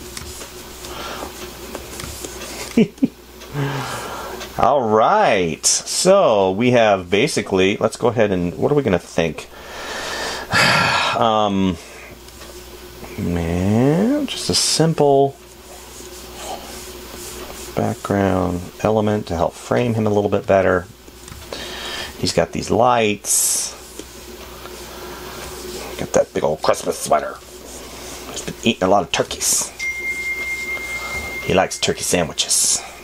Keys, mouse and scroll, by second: 0.6 space, 27.2 space, 29.6 space, 31.5 space.